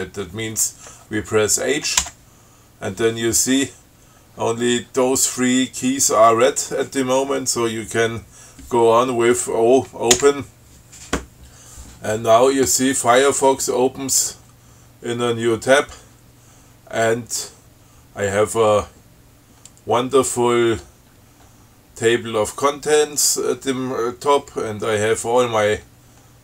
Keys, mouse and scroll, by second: 2.3 h, 10.4 o, 13.7-16.3 drag, 19.9-21.2 scroll down 6, 21.4-22.0 scroll up 2, 24.9-26.4 scroll down 10.